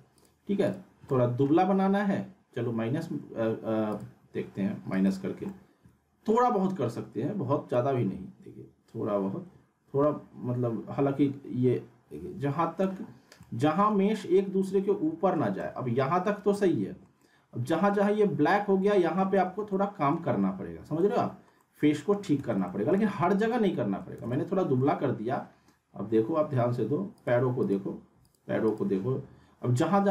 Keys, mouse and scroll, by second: 1.1-1.7 alt+middle click, 1.6 scroll up 1, 3.9 click, 4.9 right click, 5.5-6.4 alt+middle drag, 7.7-13.0 drag, 13.1 scroll up 1, 13.4-14.3 alt+middle click, 14.3-14.7 scroll up 1, 14.7-15.6 middle click, 15.6-16.5 scroll down 1, 16.6-18.1 alt+middle drag, 20.4-21.0 scroll up 1, 21.0-21.9 middle click, 22.4 z, 22.7 alt+middle click, 23.2 scroll up 1, 23.5-24.1 alt+middle click, 24.2 z, 24.3-24.9 alt+middle click, 25.0-26.0 scroll up 1, 27.2 click, 28.7 click, 29.8-30.1 scroll up 1.